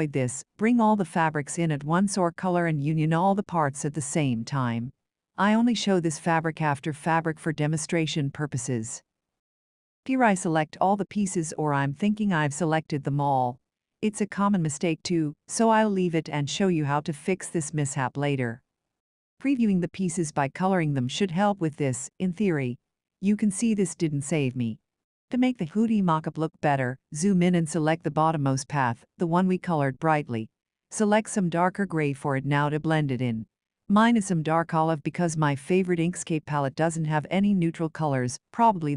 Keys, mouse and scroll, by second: 2.4 ctrl+shift+click, 6.8 click, 10.0 click, 11.0 click, 12.0 shift+click, 21.2 click, 24.5 click, 27.1 shift+click, 27.9-28.5 ctrl+scroll, 28.5 click, 31.7 Right, 32.2 click, 33.6-34.0 ctrl+scroll, 36.0 click.